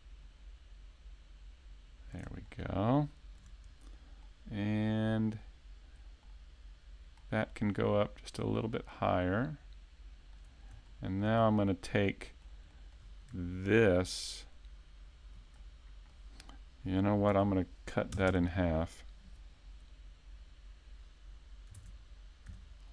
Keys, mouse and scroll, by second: 2.5 shift+middle click, 3.1 shift+middle click, 4.2 middle click, 6.2 middle click, 8.7 click, 10.9 shift+middle click, 11.5 middle click, 12.7 shift+middle click, 15.6 middle click, 17.3 ctrl+r, 21.7 ctrl+Tab.